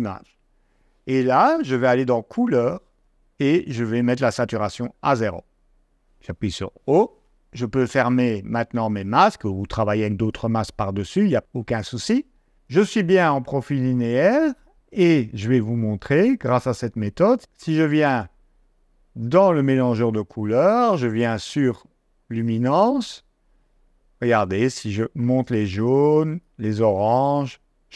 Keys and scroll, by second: 6.4 o.